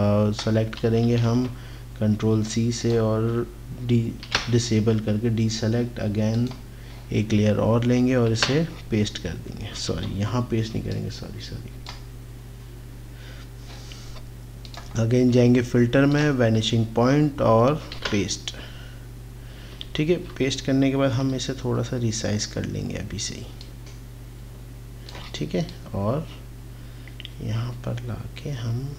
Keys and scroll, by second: 0.8 ctrl+c, 4.3 ctrl+d, 8.3 ctrl+v, 10.0 ctrl+z, 18.0 ctrl+v, 20.1 ctrl+t.